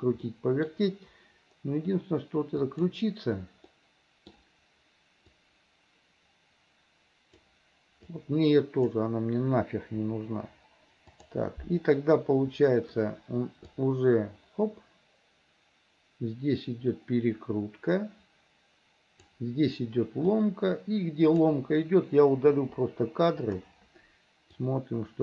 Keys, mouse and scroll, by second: 0.3 middle click, 2.6 click, 3.7 middle click, 5.4-7.6 drag, 8.2 click, 10.1 Delete, 11.2 click, 13.8-19.4 drag, 20.4-21.4 drag, 22.6 Delete, 24.7-25.2 drag.